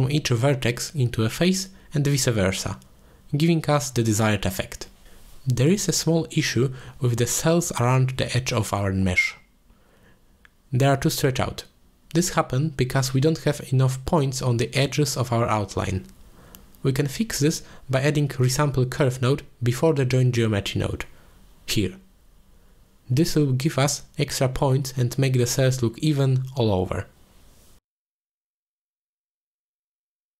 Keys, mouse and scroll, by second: 3.6 middle click, 5.6 click, 6.0 click, 6.3 click, 6.6 click, 7.0 click, 7.8 shift+middle click, 9.9-11.1 scroll up 2, 11.5 shift+middle click, 13.4 shift+middle click, 15.4-15.8 shift+middle drag, 17.1 shift+middle drag, 18.4-18.9 middle drag, 19.2 shift+middle click, 20.0 middle click, 20.9 drag, 21.0 click, 21.4 shift+a, 26.9-28.5 drag, 29.1-30.3 middle drag.